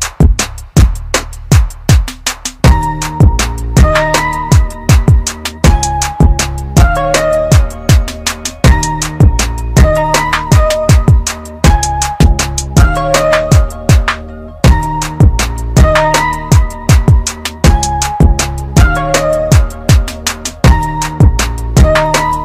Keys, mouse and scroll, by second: 2.5 space, 3.5 scroll down 1, 4.3 click, 5.4 scroll down 1, 6.9 click, 7.9-9.5 scroll down 1, 15.9 click.